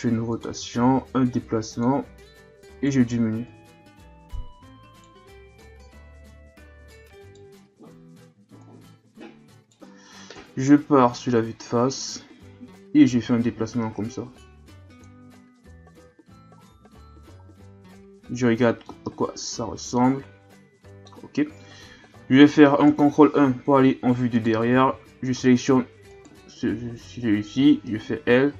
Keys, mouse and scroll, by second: 0.6 g, 2.3 right click, 3.5 right click, 5.6 right click, 8.6 right click, 10.3 KP_1, 11.9 click, 15.2 a, 15.7 Tab, 16.3 a, 16.6-17.4 scroll down 1, 17.4-18.7 scroll down 1, 18.7 scroll down 1, 18.8-21.9 middle drag, 22.8 ctrl+KP_1, 23.9-24.3 scroll up 1, 24.3 right click, 24.9 Tab, 25.3-26.1 scroll up 1, 26.1 right click, 27.6 l.